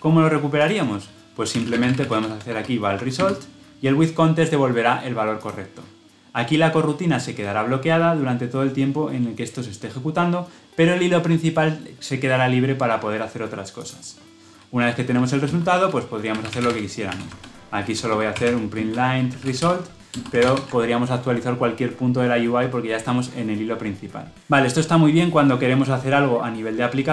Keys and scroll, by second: 2.9 ctrl+alt+Left, 20.0 Return, 20.2 ctrl+alt+l, 20.4 ctrl+alt+o.